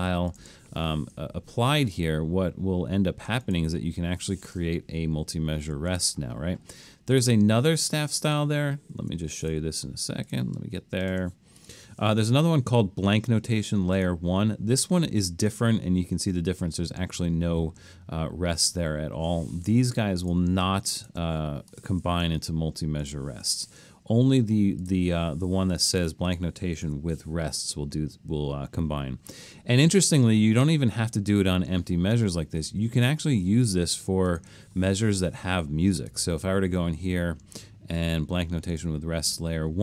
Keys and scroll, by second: 5.8 super+z, 9.0 BackSpace, 19.6 Escape, 26.9 BackSpace.